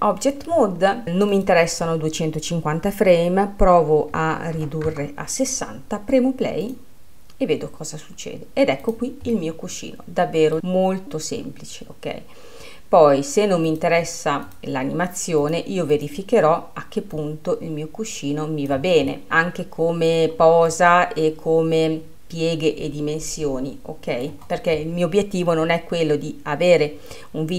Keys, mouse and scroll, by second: 0.0-1.0 drag, 1.3-9.4 drag, 9.4-11.0 middle drag, 11.0-19.1 drag, 19.1-23.8 middle drag.